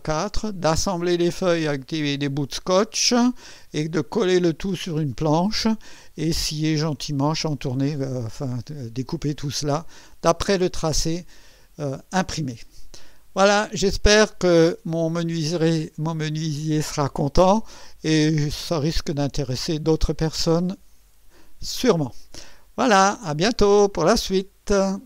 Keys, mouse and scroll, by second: 19.3 right click, 25.0 click.